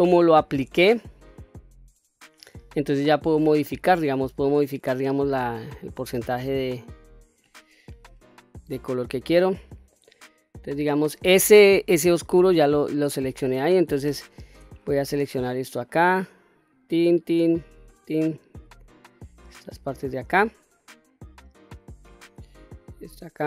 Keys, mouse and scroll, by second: 3.0 click, 7.7 scroll down 1, 8.1-9.8 middle drag, 13.9 shift+middle click, 14.7 click, 15.3 shift+middle click, 16.6 shift+click, 17.0 shift+click, 17.8 shift+click, 18.4 shift+click, 18.8 shift+click, 19.7 shift+click, 20.2-21.9 middle drag, 22.5 shift+click, 23.3 shift+click.